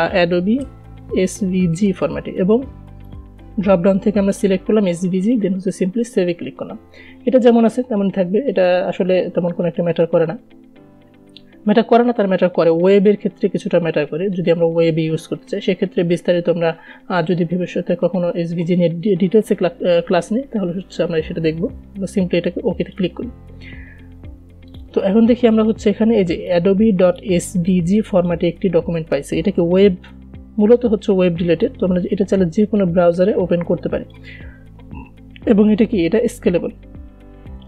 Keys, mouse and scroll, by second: 0.0-2.5 typing, 3.4 click, 23.2-28.4 drag, 32.2-35.4 drag.